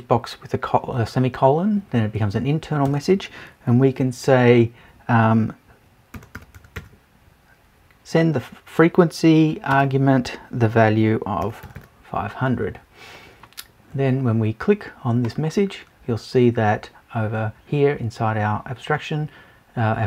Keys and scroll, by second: 2.9 Return.